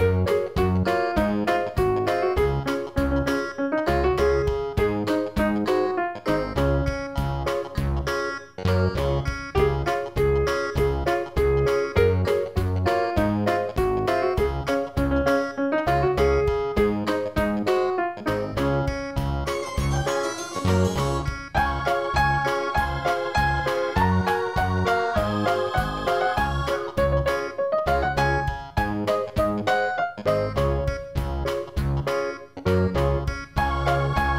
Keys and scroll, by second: 20.1 ctrl+i.